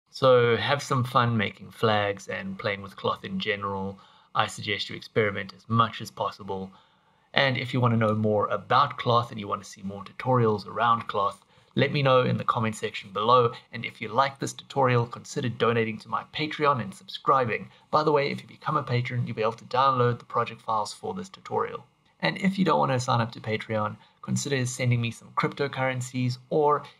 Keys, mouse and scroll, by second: 0.1 click.